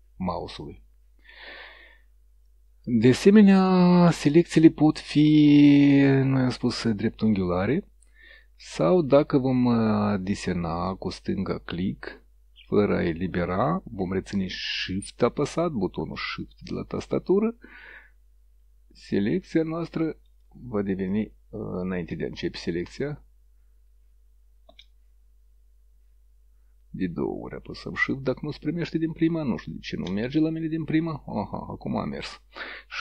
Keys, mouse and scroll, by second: 3.5 click, 6.1-8.5 drag, 10.2-20.6 drag, 20.3 shift+right click, 21.1 click, 22.8-28.0 shift+drag, 28.3 click, 29.1-33.0 drag.